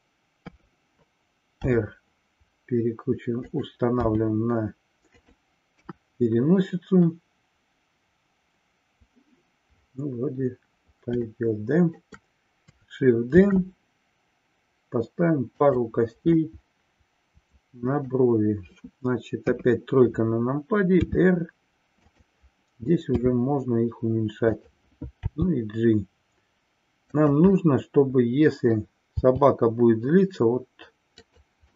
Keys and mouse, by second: 0.3 KP_3, 1.5 r, 3.6 click, 5.4 click, 5.7 KP_1, 11.4 shift+middle click, 13.4 shift+d, 15.7 click, 16.4-18.3 middle drag, 19.4 KP_3, 21.1 r, 24.6 click, 27.3 click, 27.7-29.0 middle drag, 31.4 click.